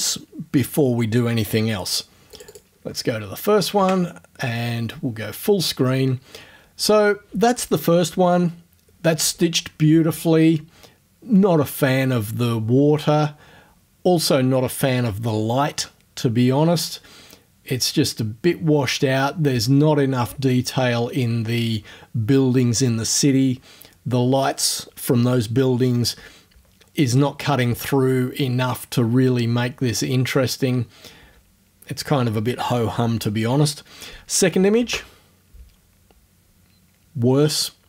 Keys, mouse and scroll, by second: 2.4 click, 3.8 Tab, 34.8 space.